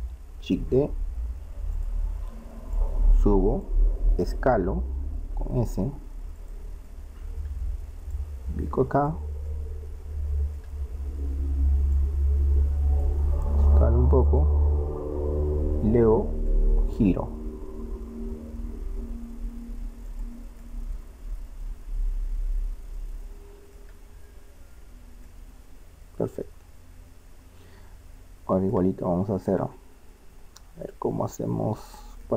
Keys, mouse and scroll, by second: 0.9 shift+d, 4.6 s, 6.9 click, 7.1-8.1 middle drag, 8.1 click, 9.5-11.3 middle drag, 11.9-13.6 drag, 13.5 s, 16.5-17.8 middle drag, 17.8 r, 20.6-27.4 middle drag, 29.4-30.5 middle drag, 31.5-32.3 middle drag.